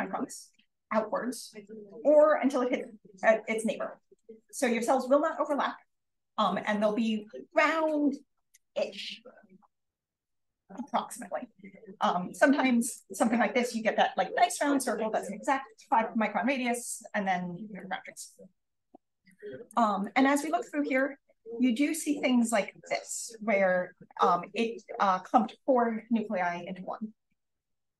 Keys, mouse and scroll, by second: 6.6-11.9 scroll down 2, 11.9 scroll down 1, 12.0 click, 12.7 click, 12.9-16.7 drag, 16.7-17.6 scroll up 2, 17.6-19.3 scroll up 1, 19.3 click, 19.9 click, 20.6 click, 27.5 click.